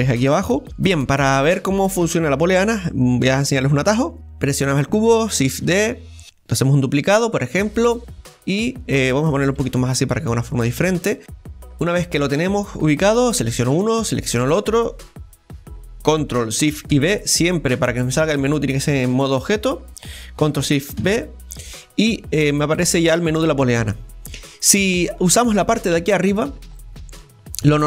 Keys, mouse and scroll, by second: 0.9 Delete, 1.0-4.0 right drag, 5.6 shift+d, 11.5-13.3 middle drag, 13.3-16.9 right drag, 19.9 ctrl+shift+b, 21.0 ctrl+shift+b.